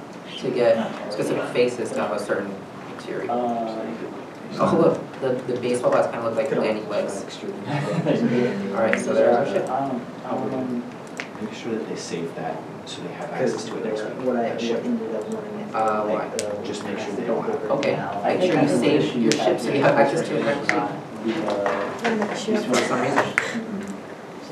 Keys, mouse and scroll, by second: 0.4 shift+middle click, 0.7-1.6 shift+scroll down 2, 1.6 scroll down 1, 1.6 right click, 7.6 right click, 8.0 right click, 10.6 right click, 10.7 right click, 10.7 right click, 11.4 right click, 11.4 right click, 11.4 right click, 12.0 right click, 12.0 right click, 12.1 right click, 12.5 right click, 12.5-16.4 typing, 17.1 right click, 17.7 right click, 23.7 right click, 24.3 right click, 24.4 right click.